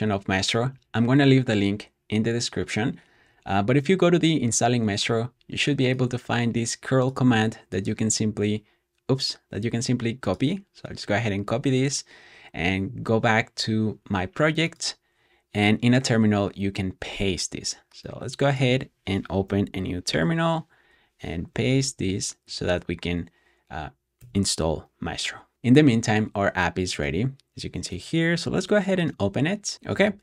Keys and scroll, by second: 20.0 ctrl+shift+`, 21.5 super+v, 24.1 Return.